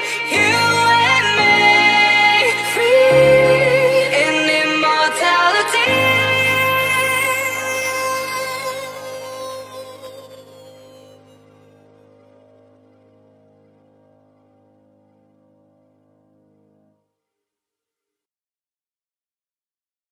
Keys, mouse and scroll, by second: 0.1 F10, 0.7 click, 1.4 right click, 2.0-2.6 scroll down 1, 2.8 click, 4.9-6.6 typing, 7.3 Return, 8.5 click, 10.0 Delete, 10.8 click, 11.2-12.4 typing, 12.5 click, 15.0 F10, 15.7 click.